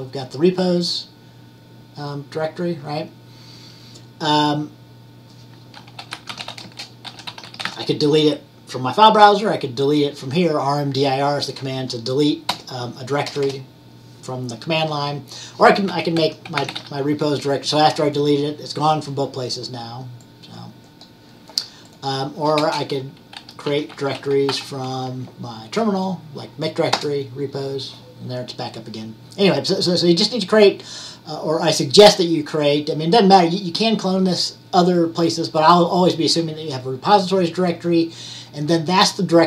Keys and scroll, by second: 5.8-8.2 typing, 16.7 typing, 23.2-25.1 typing.